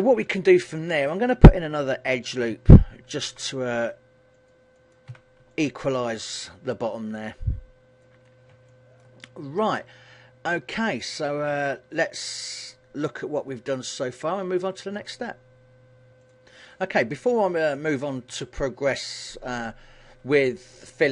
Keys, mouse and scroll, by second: 0.5 shift+middle click, 1.4-2.3 scroll up 5, 3.1 ctrl+r, 5.0 click, 5.2 a, 5.6 middle click, 8.4-9.0 scroll down 3, 8.8 shift+middle click, 9.3 middle click.